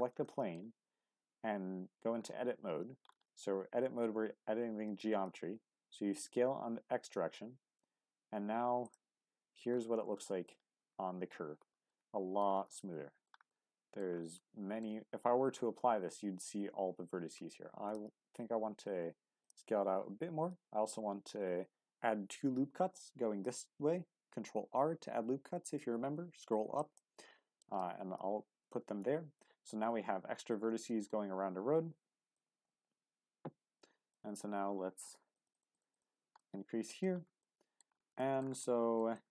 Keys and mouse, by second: 0.3 shift+middle click, 4.8 x, 8.8 click, 9.2 Tab, 10.2 middle drag, 11.9-12.4 middle drag, 12.7-13.3 middle drag, 13.5-14.0 middle drag, 14.3-14.8 middle drag, 17.0 Tab, 17.6 s, 17.9 x, 19.4 click, 20.5 ctrl+r, 28.6 Tab, 30.9 shift+middle click, 32.4-34.1 drag, 35.4-36.4 drag, 36.4 middle click, 37.4 middle click, 38.2 shift+middle click, 38.6-39.3 middle drag.